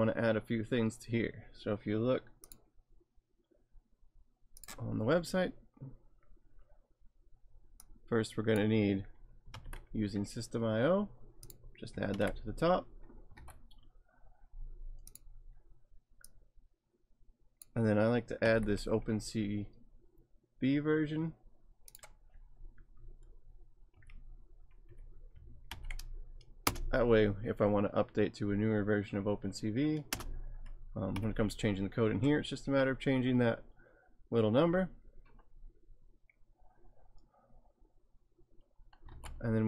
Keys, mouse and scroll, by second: 4.8 click, 7.9 click, 9.5 ctrl+c, 11.5 click, 12.1 ctrl+v, 13.5 ctrl+v, 14.6 alt+Tab, 15.1 click, 16.3 click, 18.4 ctrl+c, 21.9 click, 24.0 Up, 24.9 Up, 25.7 ctrl+v, 26.6 Return, 30.1 Return, 31.1 Up, 39.1 alt+Tab.